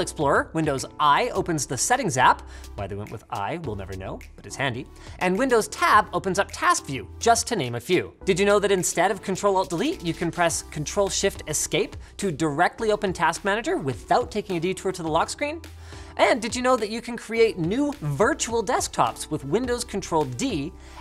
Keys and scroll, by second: 0.5 super+i, 5.1 super+Tab, 11.6 ctrl+shift+Escape.